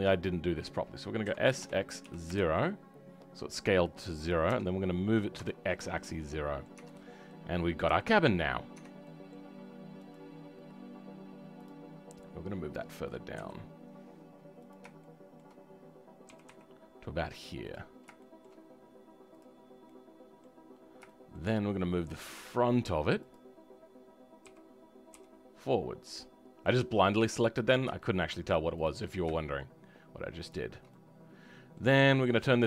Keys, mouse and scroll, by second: 6.1 middle click, 6.7 Tab, 7.0 scroll down 3, 7.3-8.3 middle drag, 8.3-8.7 scroll up 3, 8.7 Tab, 9.0-10.1 middle drag, 10.1 click, 11.6-13.3 drag, 13.3 KP_3, 14.6 click, 15.0-16.3 shift+middle drag, 16.3 g, 17.8 scroll down 2, 18.1-19.3 shift+middle drag, 19.3 click, 19.6 scroll down 3, 19.8 middle click, 20.1 right click, 20.7-21.0 scroll up 2, 21.0-22.5 shift+right drag, 21.0 shift+middle click, 22.5-27.2 drag, 27.2-28.0 scroll up 2, 28.0 shift+right click, 28.0 shift+middle click, 28.8 click, 29.0-29.3 scroll down 2, 29.3-30.5 shift+middle drag, 30.5 shift+click, 30.9-32.6 middle drag.